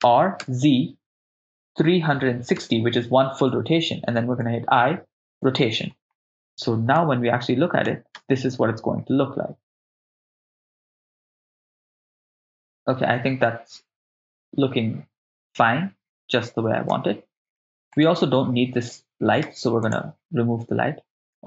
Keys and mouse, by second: 0.0 r, 0.5 z, 2.3 3, 2.6 6, 2.7 0, 3.4 Return, 4.4 i, 7.0 click, 8.1 shift+space, 16.9 shift+space, 18.0 click, 18.0 right click, 19.4 x.